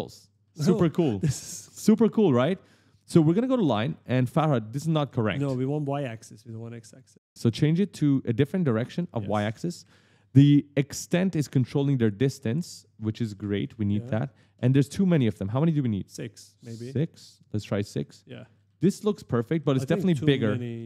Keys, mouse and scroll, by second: 0.0 right click, 2.2 click, 2.8 click, 3.2-4.6 typing, 3.4 right click, 6.3 click, 8.2 click, 8.7 right click, 10.9 click, 13.8 right click, 15.4 click, 17.1 click, 17.5-20.2 typing, 17.6 right click, 20.3 right click.